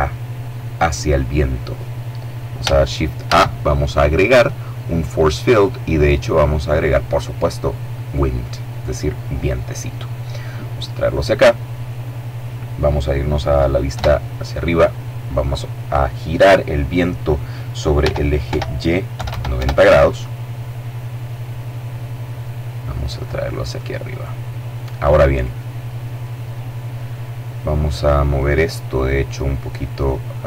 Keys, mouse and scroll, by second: 2.9 shift+a, 7.7 click, 9.7-11.5 drag, 13.5 KP_7, 17.6 r, 18.0 y, 18.7 KP_9, 18.8 KP_0, 19.1 KP_Enter, 20.3-20.9 scroll down 2, 21.0-22.5 middle drag, 22.8-24.2 drag, 24.0 middle click, 25.4 middle click, 26.0 middle click, 26.7 middle click, 27.5 middle click, 28.3 middle click, 29.3 click.